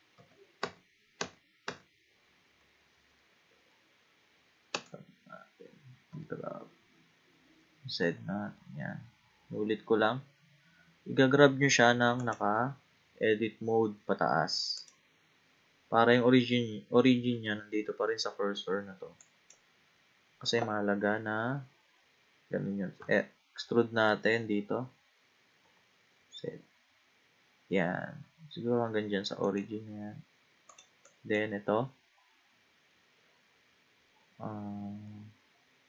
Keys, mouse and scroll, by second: 0.2 ctrl+z, 0.6 ctrl+z, 1.2 ctrl+z, 1.7 ctrl+z, 4.7 Tab, 6.1 g, 14.8 click, 19.2 click, 23.0 e, 30.7 click, 31.1 click.